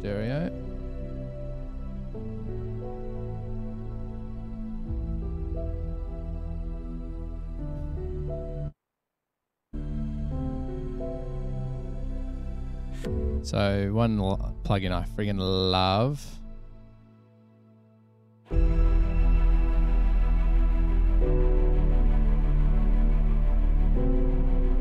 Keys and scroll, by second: 19.2-21.8 typing, 23.3 Page_Down, 23.7 Page_Down, 23.9 Page_Down.